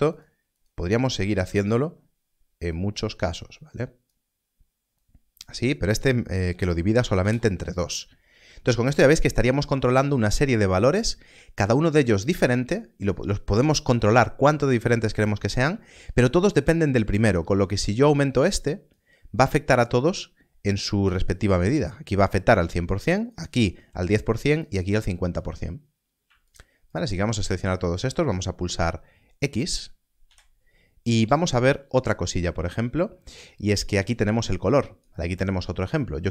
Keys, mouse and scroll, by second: 0.5 click, 1.3 shift+d, 2.7 click, 6.9 2, 7.1 Return, 8.1 scroll down 1, 15.9 scroll up 1, 17.5 click, 21.7 click, 24.6 click, 26.4 shift+click, 30.2 x, 32.6 x, 34.3 click.